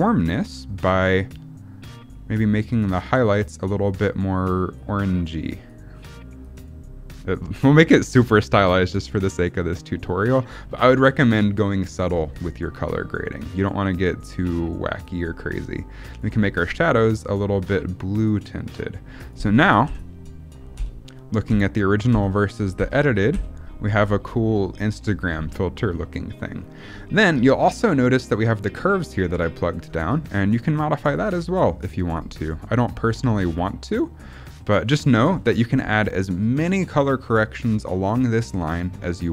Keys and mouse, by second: 1.1-2.1 drag, 2.5 click, 3.5-4.0 drag, 4.4 click, 5.4 click, 6.3 click, 7.2 click, 7.9 click, 8.9 click, 13.9-14.4 drag, 14.9 click, 15.9 click, 16.8-17.7 drag, 18.2 click, 19.2 click, 19.8-23.2 typing, 26.0 click, 30.2 click, 31.2 click, 31.7 click, 32.8 click, 33.3 click, 34.1 click, 34.8 click, 38.3-38.7 drag, 39.2-39.3 drag.